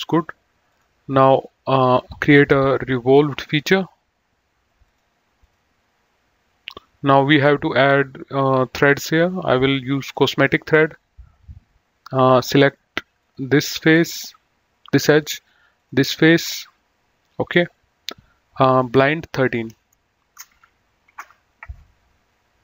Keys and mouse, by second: 0.5 click, 2.4 click, 4.8 click, 10.1 click, 13.0 click, 15.6 click, 18.8 click, 20.2 shift+Home, 20.9 KP_1, 21.2 Return.